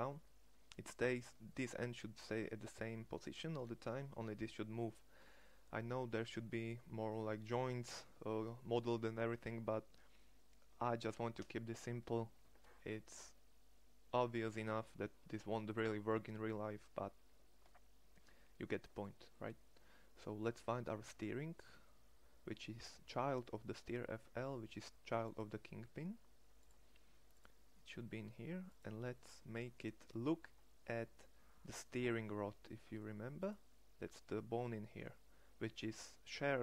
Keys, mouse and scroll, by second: 5.6-5.9 middle drag, 13.4 middle click, 15.2-18.5 middle drag.